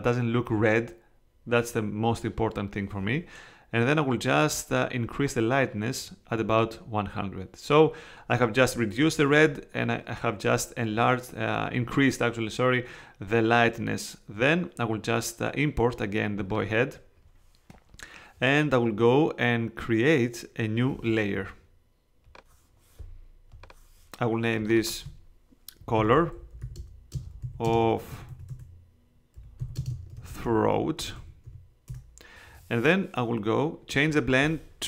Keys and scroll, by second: 25.7-31.9 typing.